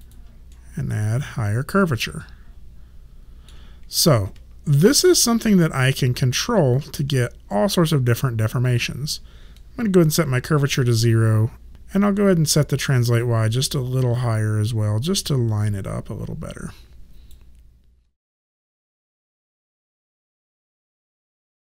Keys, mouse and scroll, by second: 0.0 click, 0.5 middle click, 5.3 ctrl+z, 8.6 click, 10.0 KP_0, 10.5 Return, 10.5 KP_Enter, 11.7 ctrl+z, 13.2 click.